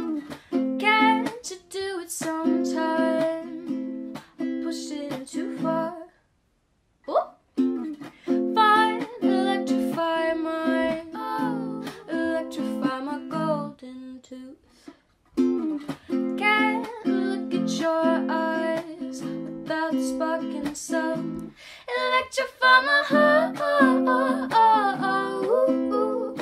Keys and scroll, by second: 1.2-1.9 typing.